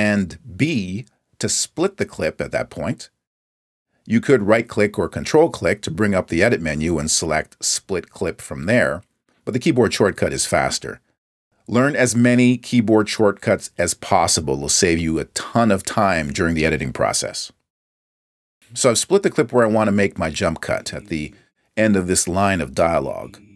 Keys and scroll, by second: 1.6 super+b.